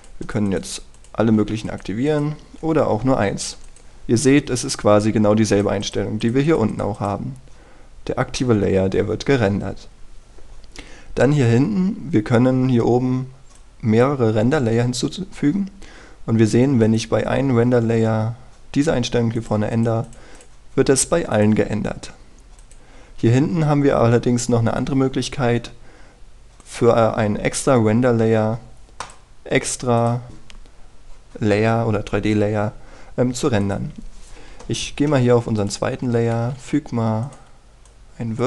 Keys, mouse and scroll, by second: 0.6 shift+click, 1.2 shift+click, 1.9 shift+click, 2.6-30.5 drag, 37.3 shift+a, 38.2 click.